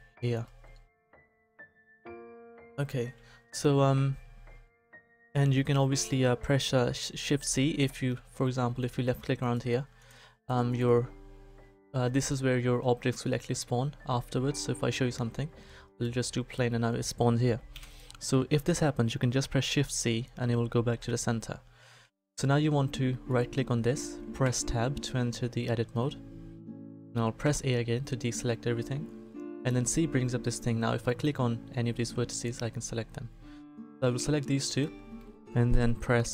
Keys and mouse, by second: 2.4-4.7 middle drag, 4.7-12.4 drag, 15.0 shift+a, 17.7 Delete, 19.6 shift+c, 23.2-24.4 right drag, 24.4 Tab, 27.4 a, 29.5 c, 34.8-36.3 drag.